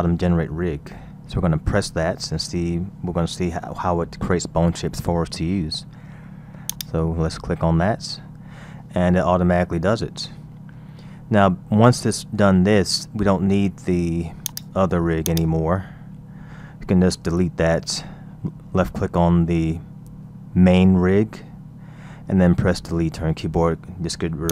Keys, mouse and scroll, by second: 6.7 click, 8.6 scroll down 2, 9.2-10.7 scroll up 3, 10.7-12.5 scroll down 1, 12.5-14.5 middle drag, 14.5 click, 15.2 click, 16.2-18.4 scroll down 3, 19.5-22.6 scroll up 2, 22.9 Delete, 23.8-24.5 scroll up 1.